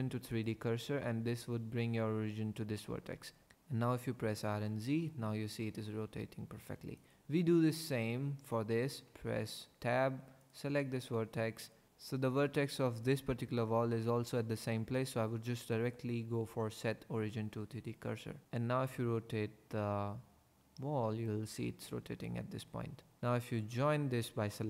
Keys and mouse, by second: 4.3 r, 4.6 z, 6.9 click, 9.1 Tab, 10.4 click, 15.6-18.7 drag, 18.7 r, 18.8 z, 22.2-23.2 drag, 23.5 shift+click.